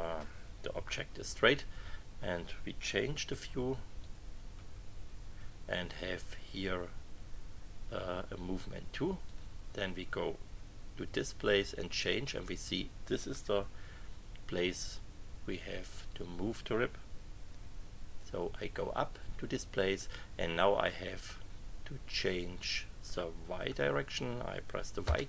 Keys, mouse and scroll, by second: 3.3 KP_3, 4.0 click, 4.5 KP_3, 9.2 click, 11.0 KP_3, 17.6 Right, 18.4 Right, 25.0 y.